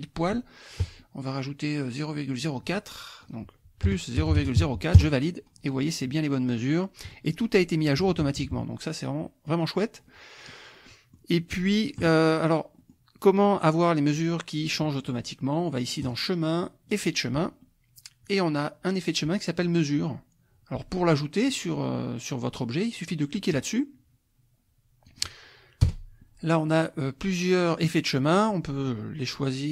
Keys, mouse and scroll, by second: 3.2 click, 3.9 KP_Add, 4.2 KP_0, 4.3 KP_Decimal, 4.6 KP_4, 5.0 KP_Enter, 8.2 KP_Subtract, 9.2 click, 10.1 click, 10.9 click, 12.8-15.3 drag, 16.0 click, 16.9 click, 23.5 click, 25.1 click, 25.8 BackSpace.